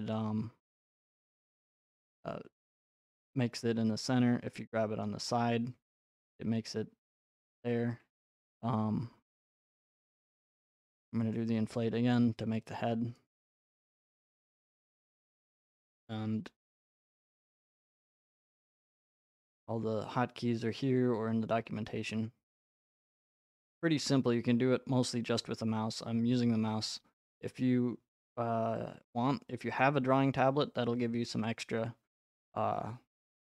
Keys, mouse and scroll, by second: 0.1 right click, 0.7 ctrl+z, 1.6 click, 5.1 right click, 6.1 click, 7.3 right click, 10.9 click, 11.3 click, 17.8 click, 19.0 right click, 22.3 right click, 25.6 click, 27.3 right click, 29.1 middle click, 29.4-30.4 scroll, 30.4-30.9 scroll.